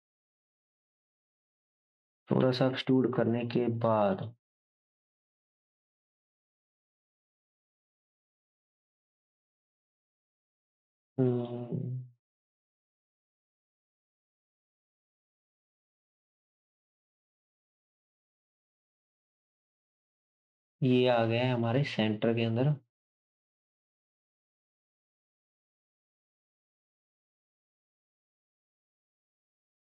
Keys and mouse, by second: 0.9-28.8 middle drag, 2.4 g, 2.6 y, 4.9 g, 11.4-15.9 shift+drag, 14.2 g, 18.2 KP_7, 19.1 g, 22.2-29.9 right drag, 29.2 shift+s.